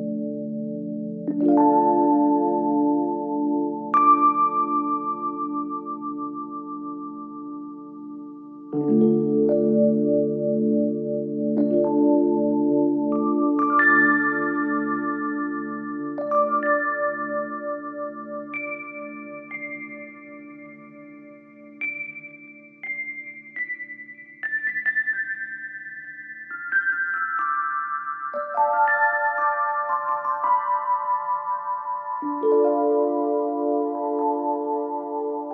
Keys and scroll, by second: 2.5 ctrl+F1, 5.9 ], 7.2 Delete, 8.3 =, 8.6 ], 10.1 4, 19.5 3.